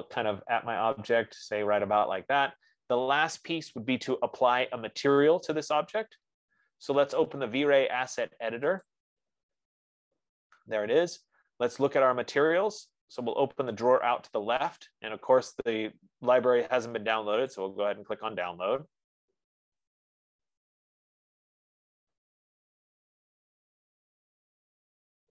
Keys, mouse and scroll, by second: 0.1-1.1 scroll, 1.1 scroll, 9.3-14.2 drag, 18.0 click, 20.6 F15.